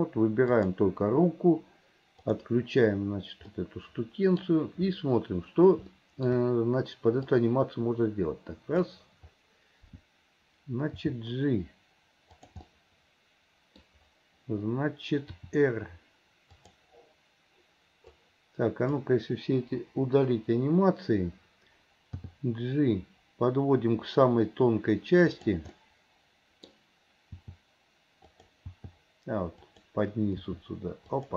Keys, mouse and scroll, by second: 0.6 click, 2.3-3.6 drag, 3.6-4.4 middle drag, 5.9-6.3 shift+middle drag, 7.6-9.0 drag, 12.9-13.9 middle drag, 18.2-19.0 drag, 25.8-31.3 middle drag.